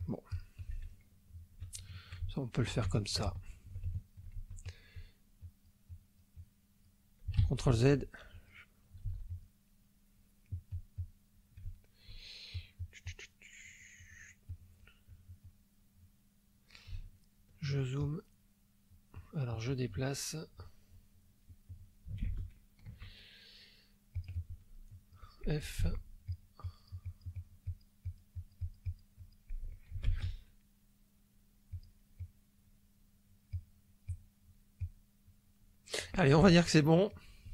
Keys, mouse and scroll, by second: 0.9 ctrl+middle click, 1.8-3.9 ctrl+shift+middle drag, 3.9 ctrl+shift+middle click, 5.4 click, 5.9-7.0 drag, 7.4 ctrl+z, 8.3 ctrl+click, 9.0 ctrl+z, 9.3 ctrl+click, 10.7 click, 11.8 shift+middle click, 12.5-14.3 shift+drag, 14.4 click, 15.0-16.2 drag, 17.2 ctrl+click, 18.0-19.1 ctrl+drag, 22.2 shift+space, 24.1 click, 24.9 click, 25.8 f, 26.3 click, 26.6-27.9 drag, 28.0-29.5 drag, 30.1 shift+space, 31.7 click, 32.2-33.5 drag, 33.6-34.7 drag, 34.7 click, 35.6 click, 36.5 ctrl+middle click.